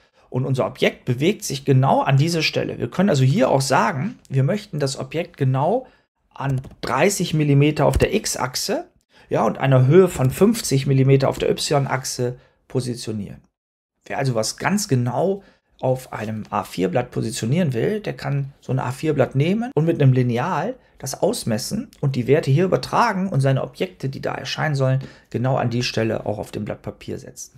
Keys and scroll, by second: 6.1-7.0 typing, 7.8 Tab, 9.8-10.6 typing, 11.2 Return.